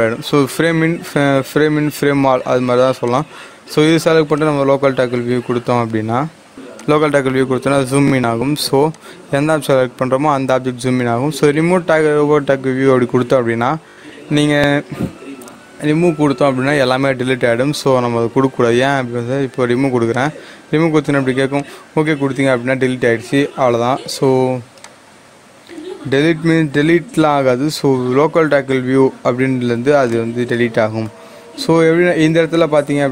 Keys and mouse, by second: 1.0-6.5 drag, 20.0 click, 20.1 click, 24.7 click, 24.8-32.5 drag.